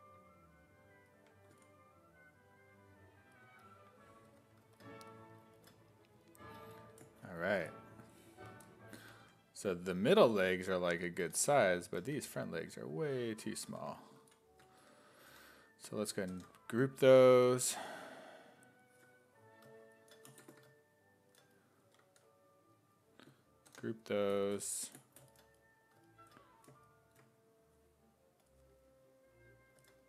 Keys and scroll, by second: 4.4 1, 9.2 1, 11.4 1, 12.2 w, 13.8 1, 14.2 ctrl+z, 14.8 1, 15.3 1, 16.3 ctrl+w, 23.7 ctrl+w.